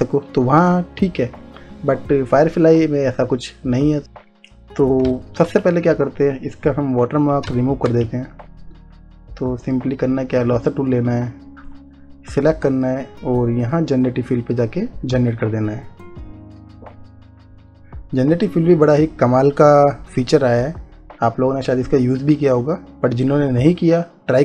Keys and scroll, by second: 5.2 space, 7.7 space.